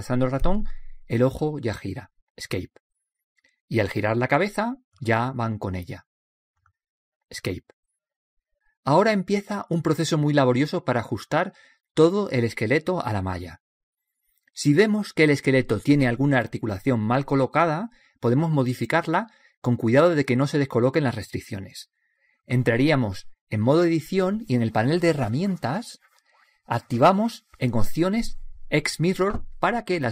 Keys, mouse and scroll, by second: 1.9 r, 5.7 middle click, 6.6-7.6 right drag, 6.6 r, 9.0-12.0 middle drag, 18.9-20.8 drag, 24.7 middle click, 26.1-27.9 drag, 29.5-30.1 drag.